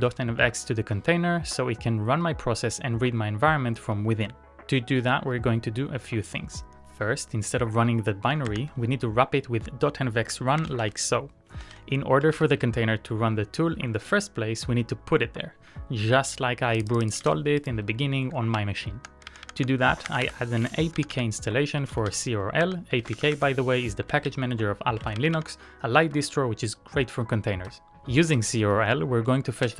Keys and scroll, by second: 0.0-0.4 typing, 0.7 Return, 5.6 typing, 8.1-8.8 typing, 10.0-13.0 typing, 18.7-23.3 typing, 24.5-25.4 typing.